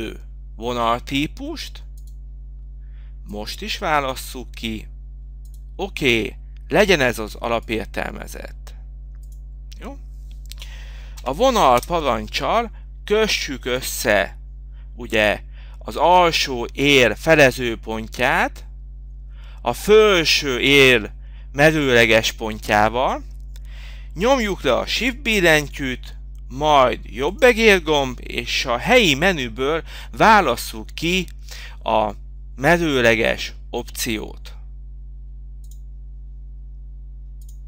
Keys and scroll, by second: 15.8 v, 16.4 o, 30.4 Return.